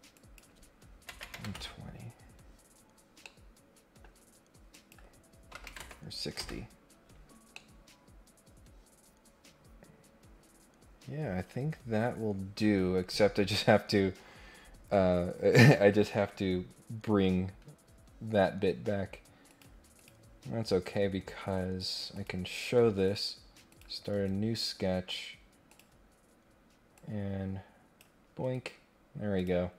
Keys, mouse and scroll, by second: 0.1 click, 3.2 middle click, 4.7 click, 7.5-11.2 middle drag, 16.0 middle click, 19.5 click, 19.9 click, 22.1 click, 22.5 click, 23.0 click, 23.7 click, 25.6 click, 26.9-28.0 drag, 28.4 Escape, 29.4 click.